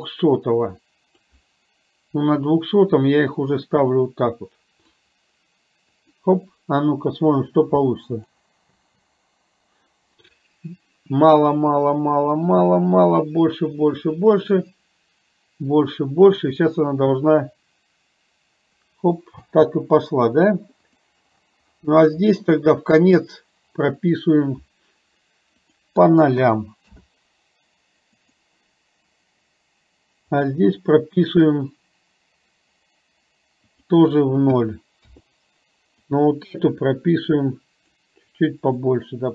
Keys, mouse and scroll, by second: 2.4-5.1 drag, 6.0 click, 8.2 drag, 8.9 space, 19.5 space, 23.2 click, 25.7-27.0 drag, 28.2 click, 30.5 click, 33.7-35.2 drag, 36.1-37.9 drag, 38.7 click.